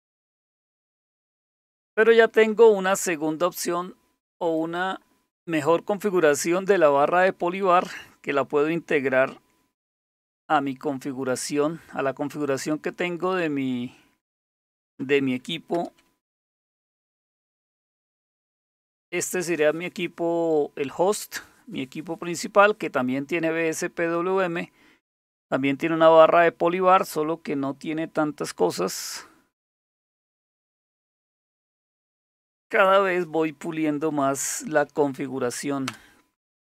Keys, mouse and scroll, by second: 4.6 click, 9.9 super+7, 12.5 click, 13.2 click, 14.8 click, 15.8 super+Return, 17.4-18.7 typing, 30.7 click, 34.4-35.7 typing, 35.9 Return.